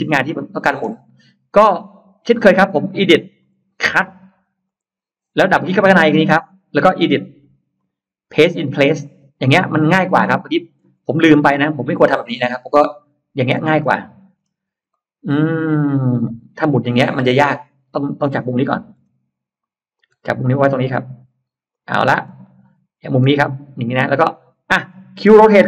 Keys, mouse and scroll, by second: 0.6 scroll up 2, 0.7 middle click, 1.5 space, 1.7 click, 3.3 click, 4.5 click, 6.0 click, 6.2 click, 7.6 click, 8.9 click, 9.9-11.1 scroll up 2, 10.9-13.3 middle drag, 13.7-14.9 scroll up 3, 14.7 middle click, 17.7 scroll up 1, 19.1 m, 19.8 click, 19.8 m, 21.5 click, 21.9-22.3 scroll up 1, 22.1-24.7 middle drag.